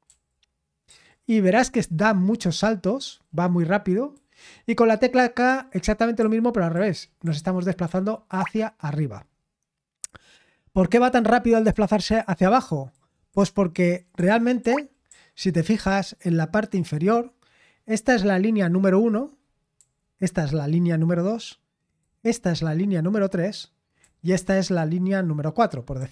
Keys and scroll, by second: 0.0-0.9 typing, 4.1 typing, 5.2-6.7 typing, 9.6 typing, 11.7-14.6 typing, 19.8 typing, 22.0 typing, 24.0 typing, 26.0 typing.